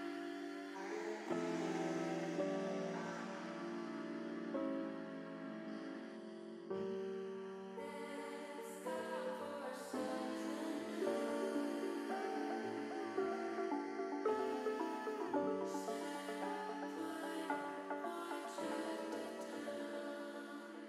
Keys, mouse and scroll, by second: 0.5 alt+h, 5.3 click, 7.8 middle click, 9.7-12.3 drag, 12.7 middle click, 15.1 click, 20.6 middle click.